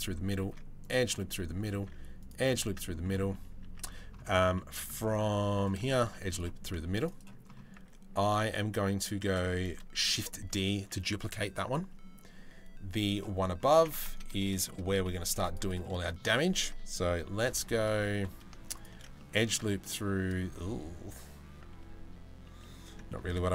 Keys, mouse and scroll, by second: 0.1 ctrl+r, 0.8 middle click, 1.3 ctrl+r, 2.1 middle click, 3.0 Tab, 3.2 Tab, 4.1 Tab, 4.1 middle click, 4.5 Tab, 5.6 ctrl+r, 6.5 ctrl+r, 7.4 Tab, 9.7 shift+d, 13.3 Tab, 14.1 shift+middle click, 14.9 ctrl+r, 15.5 shift+middle click, 16.3 ctrl+r, 18.8 shift+middle click, 19.4 middle click, 22.2-23.5 middle drag, 23.2 ctrl+b.